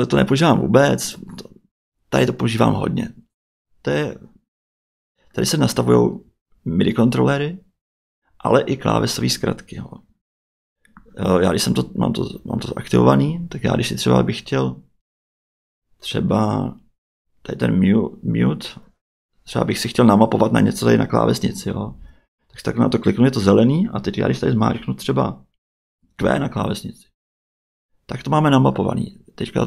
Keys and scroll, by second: 26.2 q.